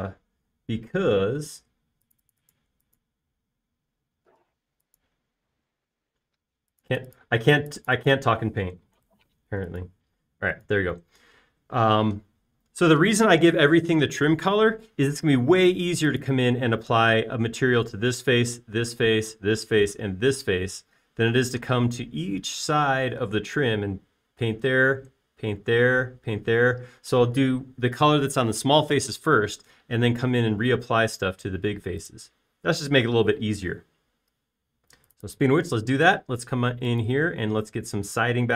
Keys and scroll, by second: 0.7 b, 1.5 space, 3.6 b, 4.3 space, 5.5 b, 7.0 space, 10.0 super+a, 10.5 b, 11.2 space, 13.7 typing, 36.7 b.